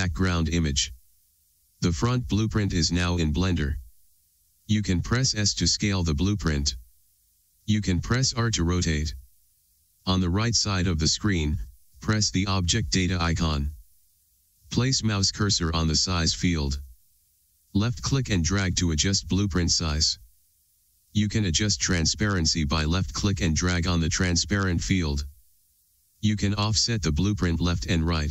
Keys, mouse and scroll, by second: 0.0-2.9 drag, 6.9 s, 8.4 click, 9.5 r, 11.7 right click, 18.5-28.3 drag.